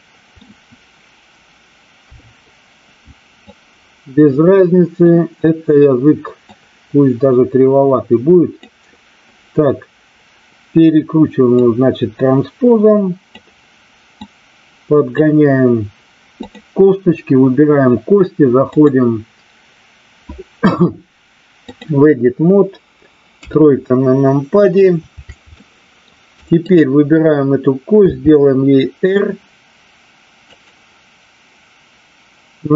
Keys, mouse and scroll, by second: 1.9 KP_3, 3.4-5.0 drag, 6.4-8.5 drag, 11.5-13.3 drag, 14.2-15.2 drag, 16.4 click, 18.8-21.8 drag, 23.4 KP_3, 25.5 shift+middle click, 26.6 click, 28.0 r, 30.5 click.